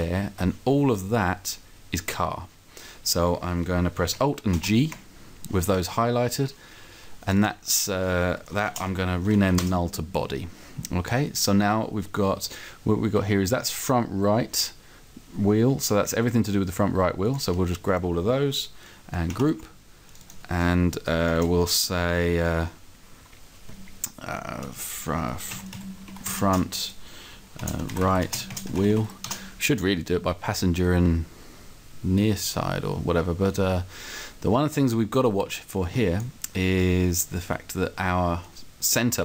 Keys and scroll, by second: 4.5 alt+g, 8.6 shift+b, 8.8 o, 9.1 d, 9.6 Return, 21.7 alt+g, 25.5-26.4 typing, 27.6-29.0 typing, 29.2 Return.